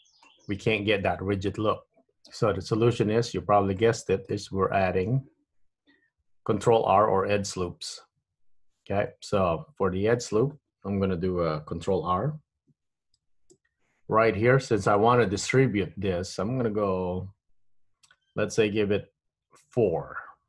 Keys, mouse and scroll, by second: 0.5-1.0 scroll down 1, 3.1 Tab, 4.0 middle click, 4.7-5.4 scroll up 2, 13.4 ctrl+r.